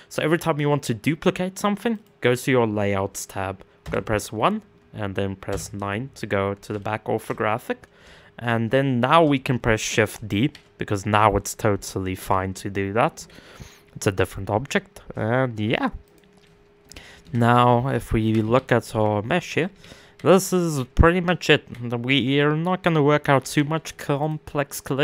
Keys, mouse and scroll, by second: 1.5 click, 3.4 KP_1, 5.1 KP_9, 5.8-6.4 scroll down 4, 6.4-7.1 shift+middle drag, 7.1-7.7 scroll up 6, 7.7-8.2 shift+middle drag, 8.2-8.9 scroll up 11, 8.9-10.0 shift+middle drag, 10.0 shift+d, 16.0 middle click.